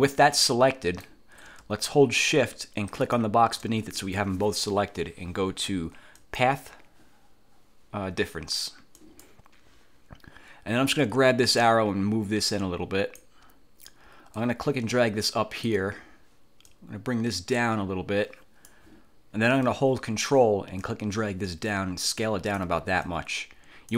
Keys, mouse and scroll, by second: 0.5 click, 3.1 shift+click, 6.3 click, 9.1 click, 11.7-13.5 drag, 14.5-16.0 drag, 16.8-19.0 drag, 20.9-22.9 ctrl+drag, 23.2-23.9 ctrl+drag.